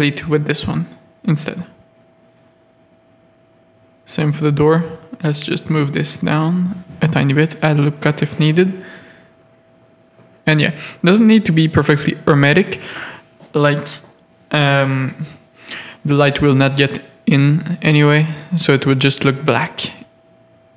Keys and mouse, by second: 0.9 g, 2.2 Tab, 2.7 Tab, 3.3 z, 4.8 z, 5.2 g, 6.6 ctrl+r, 8.1 Tab, 8.8 alt+a, 9.2 z, 10.7 Tab, 11.4 click, 11.7 g, 13.1 Tab, 13.5 alt+a, 13.8 z, 14.8 Tab, 15.1-17.1 typing, 17.9 ctrl+r, 18.7 Tab, 18.9 alt+a, 19.3 z, 19.8 z.